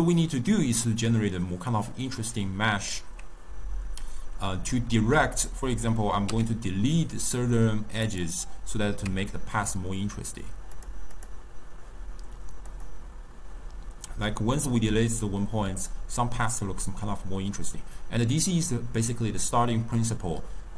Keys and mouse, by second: 5.2 2, 5.5 click, 6.3 x, 9.1 Tab, 10.8 click, 11.2 click, 12.7-15.8 drag.